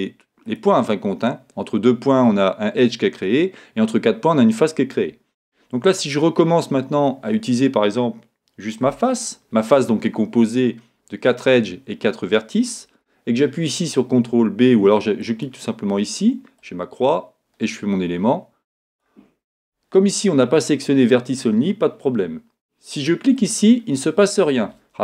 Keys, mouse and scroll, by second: 0.5 click, 8.9 3, 9.1-12.7 drag, 15.2 click, 16.6 click, 23.4 click, 24.4 click.